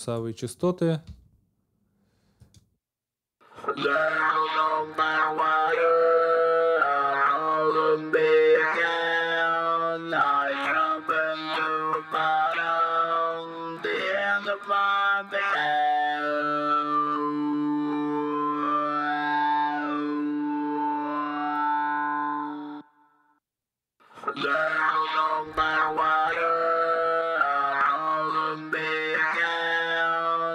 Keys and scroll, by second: 1.0 space, 22.5 space.